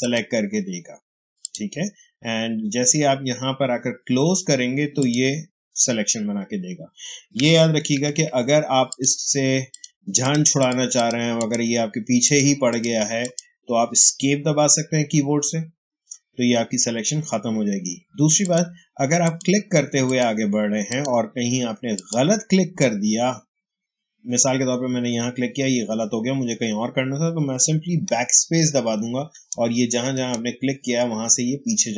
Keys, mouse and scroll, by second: 4.9 click, 7.8 ctrl+d, 8.8 click, 15.2 Escape, 18.3 click, 28.2 BackSpace.